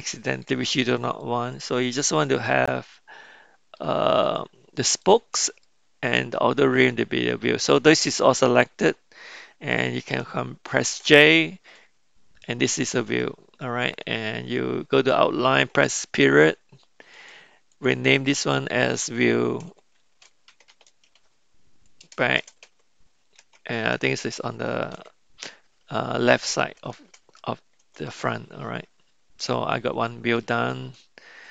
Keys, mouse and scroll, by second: 1.2 shift+click, 2.4-3.8 middle drag, 4.3 shift+click, 5.6-7.9 middle drag, 11.3 ctrl+j, 15.8 KP_Decimal, 17.2 click, 17.7 click, 18.1-27.9 drag, 20.7 e, 30.0-30.4 middle drag, 30.7-31.5 middle drag.